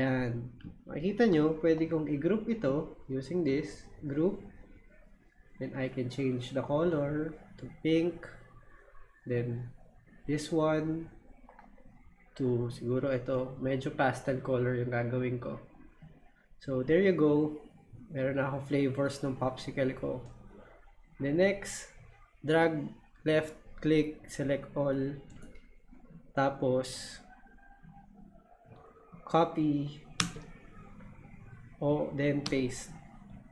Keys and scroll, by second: 30.2 super+c, 32.4 super+v.